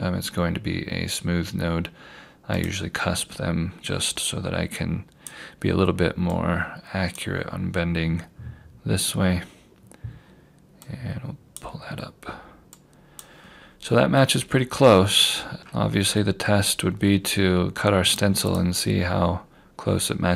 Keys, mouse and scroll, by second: 2.6 click, 9.2 scroll up 1, 10.9 click, 14.2 scroll down 1, 15.1 scroll up 1, 15.6-18.1 scroll down 1, 18.1 click, 20.2 scroll down 1.